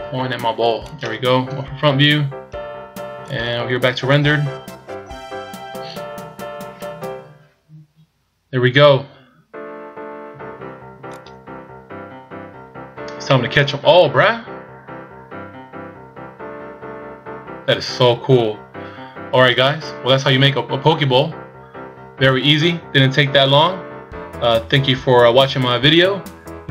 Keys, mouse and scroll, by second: 0.0 r, 1.5 KP_1, 3.2 click, 9.3-10.2 scroll up 2, 11.6 click, 14.1 middle click, 19.9-23.4 shift+scroll up 2.